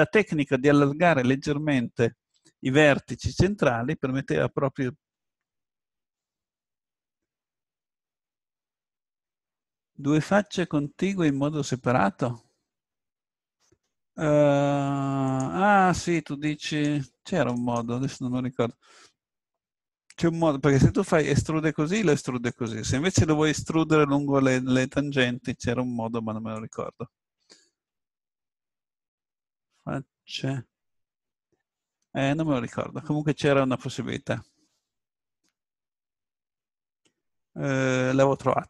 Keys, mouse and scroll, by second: 12.5-14.1 middle drag, 14.1 click, 15.3-19.5 drag, 16.7-19.2 right drag, 21.0 e, 26.6 click, 27.2 click.